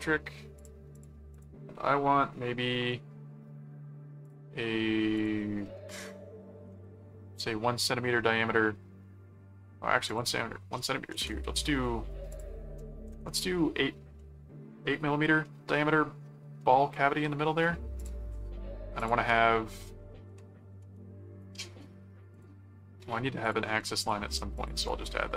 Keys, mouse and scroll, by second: 0.6 click, 2.7 right click, 4.2 click, 5.2 click, 7.7-9.1 middle drag, 10.0 click, 12.3 click, 14.2 middle click, 15.4 middle click, 16.6 middle click, 18.0 shift+click, 19.0 shift+click, 21.4 right click, 22.3 click, 23.4-25.1 drag, 24.3 alt+c, 24.9 right click.